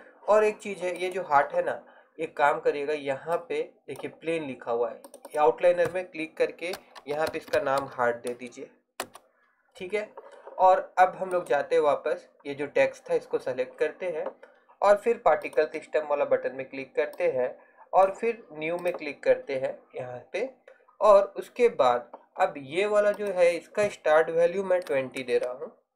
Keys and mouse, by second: 1.1-3.4 right drag, 3.4-9.1 drag, 11.4-13.9 right drag, 13.9-15.5 middle drag, 15.5-20.8 drag, 20.8-23.3 middle drag.